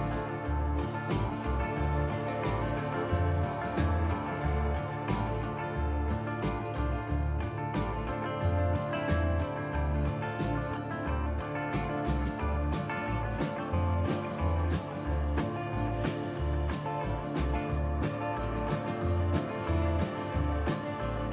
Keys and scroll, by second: 4.8-5.7 typing, 7.4 f, 10.3 p, 12.3 f, 13.8 alt+x, 14.7 alt+x, 15.1 f, 19.1 ctrl+z.